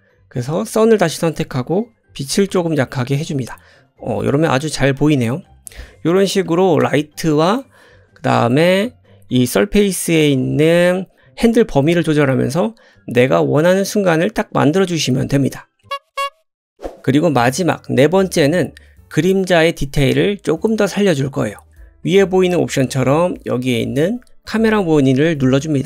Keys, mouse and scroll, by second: 0.0-6.4 drag, 3.7 middle click, 6.4 shift+middle click, 6.7 shift+click, 7.6-13.0 middle drag, 13.0 click, 13.2-15.2 middle drag, 15.2 click, 16.8-25.8 middle drag.